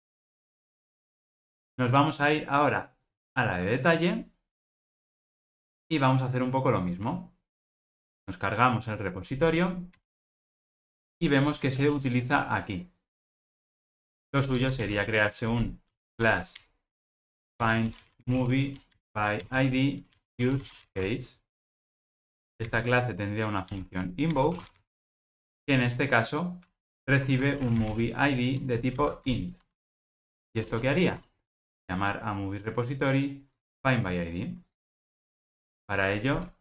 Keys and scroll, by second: 0.6 alt+super+l, 0.9 ctrl+alt+o, 16.7 Return, 22.7 alt+super+l, 29.3 Return, 33.7 super+x, 34.9 super+x, 35.0 super+v.